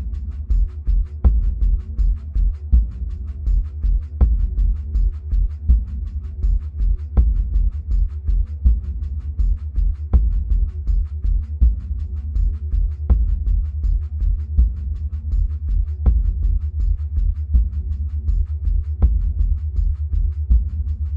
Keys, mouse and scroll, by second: 2.4-13.0 drag, 13.0-13.8 middle drag, 13.8-14.6 scroll down 2, 14.6-18.8 middle drag, 19.4-21.1 scroll down 2.